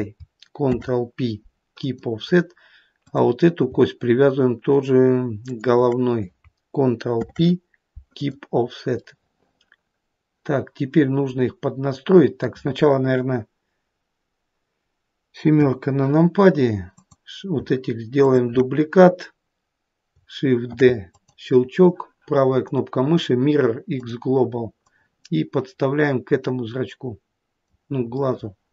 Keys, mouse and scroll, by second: 0.8 ctrl+p, 3.2 click, 5.6 shift+click, 7.3 ctrl+p, 9.1 middle click, 9.4 middle click, 15.7 KP_7, 17.1 click, 18.4 shift+click, 20.8 shift+d, 22.7 right click, 25.0 click, 28.4 middle click, 28.6 middle click.